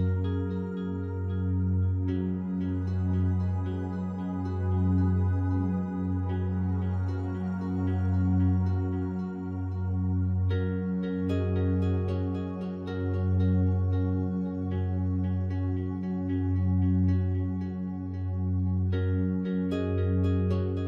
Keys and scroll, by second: 8.6 space, 17.9 space.